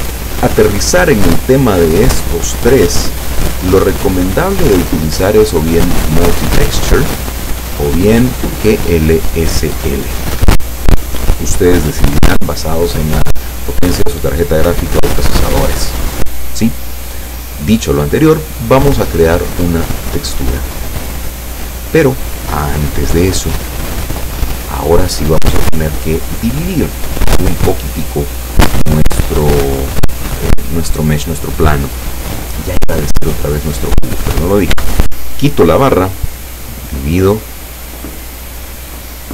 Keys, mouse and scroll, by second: 4.5 click, 10.4 Escape, 20.2 click, 22.0 click, 23.9-24.4 scroll down 2, 34.8 n, 37.1-38.9 drag.